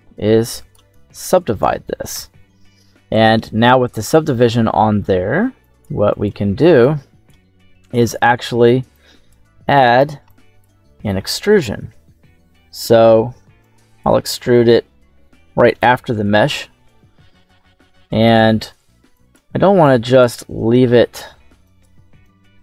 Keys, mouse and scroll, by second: 1.4 right click, 2.0 m, 3.2-3.9 scroll up 2, 3.9-4.4 scroll down 2, 5.5 drag, 6.0 click, 6.7 click, 7.5 middle click, 7.5-8.1 scroll up 1, 8.8 click, 9.9 click, 10.1 click, 10.7 middle click, 12.4 scroll up 2, 13.5 click, 14.4-15.6 drag, 16.6-17.2 scroll down 1, 17.2 scroll down 2, 17.9 middle click, 19.0 click, 19.8-20.2 drag, 21.5 click, 22.1 click.